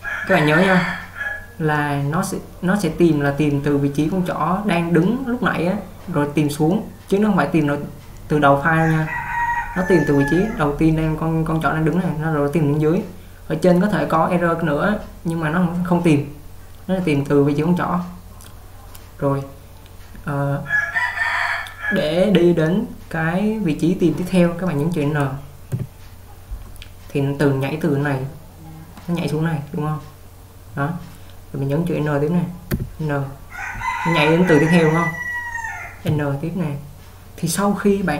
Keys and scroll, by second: 25.9 n, 32.9 n, 36.3 n.